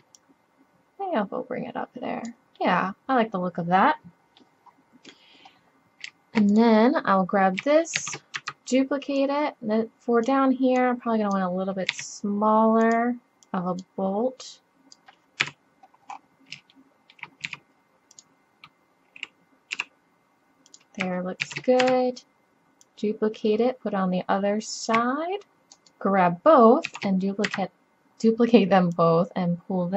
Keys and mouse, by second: 0.2-0.9 middle drag, 2.6-3.0 middle drag, 3.0-3.4 middle drag, 3.8 middle click, 4.3-6.7 middle drag, 6.7 click, 8.0 shift+d, 9.2-10.8 drag, 11.9 s, 12.8-13.5 drag, 15.4 KP_7, 17.5 s, 19.8 g, 21.5 shift+d, 22.9 drag, 23.5 click, 26.9 shift+d, 29.0 middle click.